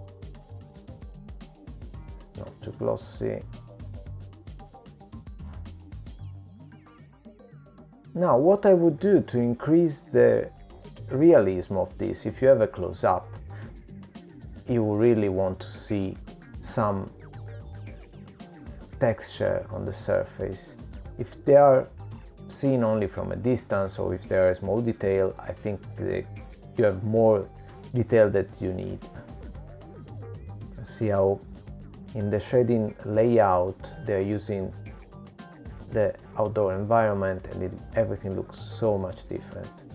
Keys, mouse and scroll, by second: 0.9-1.9 scroll down 2, 1.9 click, 1.9-2.9 scroll down 2, 7.5 click, 7.5 middle click, 8.4-9.1 scroll up 2, 9.1 scroll down 2, 10.0-10.3 scroll down 2, 10.6 middle click, 15.8-16.5 scroll up 4, 16.5-18.0 scroll down 9, 18.0-18.4 scroll down 2, 18.4-19.2 scroll up 6, 20.9 middle click, 23.4 middle click, 24.6-26.1 scroll down 9, 26.1 middle click, 28.1-28.5 scroll down 1, 28.8 middle click.